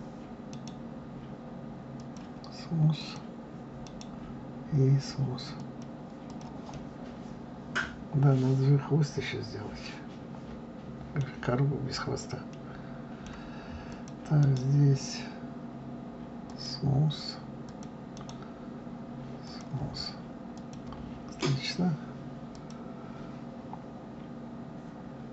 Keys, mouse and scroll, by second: 0.5-2.9 right drag, 2.9 click, 3.8-6.2 right drag, 6.2 click, 6.7-9.7 middle drag, 11.3-12.5 scroll down 3, 12.5-13.8 middle drag, 13.8 click, 14.3-17.4 right drag, 17.6 click, 18.1-20.5 right drag, 20.5 click, 22.5 click.